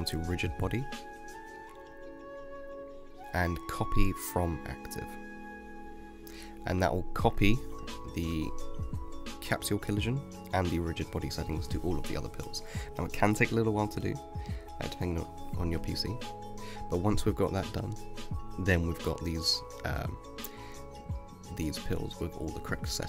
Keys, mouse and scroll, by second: 8.0-10.1 middle drag, 10.1 space, 11.1 space, 12.1-12.6 middle drag, 12.6-13.3 scroll down 6, 13.3 space, 15.9 space, 17.0-18.4 drag, 18.4 space, 19.5 space, 20.1-20.8 drag, 20.8-21.3 scroll up 4, 21.3-23.0 middle drag.